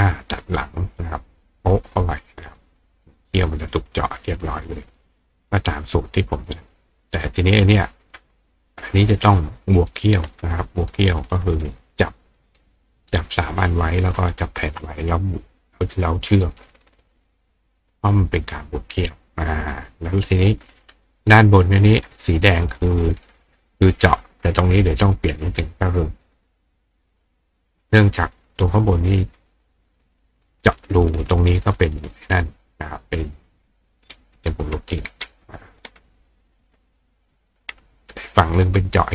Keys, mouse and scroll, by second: 1.6 click, 2.4 click, 4.6 click, 7.2 click, 8.5 click, 9.8 click, 11.1 click, 12.3 click, 13.2-14.0 drag, 14.6 shift+click, 17.2 click, 18.3 click, 20.4 click, 21.1 click, 21.9 click, 24.3 click, 25.2 click, 30.9 click, 32.4 click, 33.9 click, 35.4 click, 36.3 click, 37.2 click.